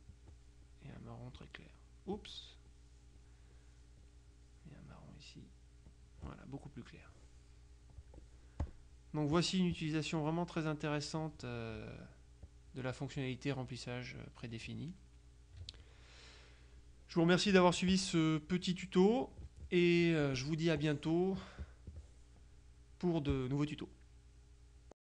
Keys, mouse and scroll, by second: 0.2 click, 1.4 click, 2.6-3.7 drag, 6.0 click, 6.7 click, 8.1-9.2 drag, 9.4 click, 12.5 click, 13.8-14.8 middle drag, 15.7 KP_Subtract, 18.0 click, 19.3 middle click, 19.6 click, 20.9-22.5 drag, 23.4 click, 25.0 click.